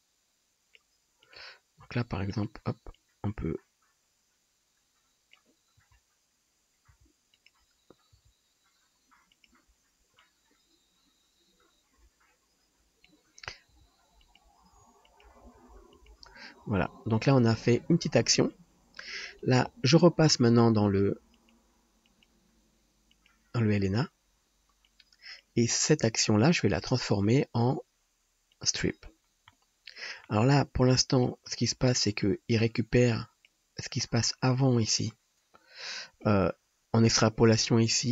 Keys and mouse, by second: 1.4-3.0 drag, 1.7 g, 5.8 g, 6.9 g, 7.5-10.3 drag, 8.1 g, 13.8 g, 14.3-16.9 drag, 14.7 g, 15.4 r, 20.4-22.0 drag, 20.4-22.0 middle drag, 20.4-22.0 right drag, 23.3-25.0 drag, 23.3-25.0 middle drag, 23.3-25.0 right drag, 29.9 click, 29.9 middle click, 29.9 right click, 35.4-38.1 drag.